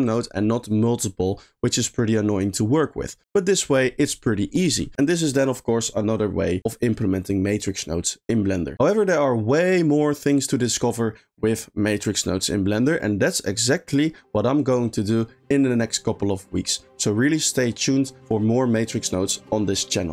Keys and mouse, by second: 0.0 click.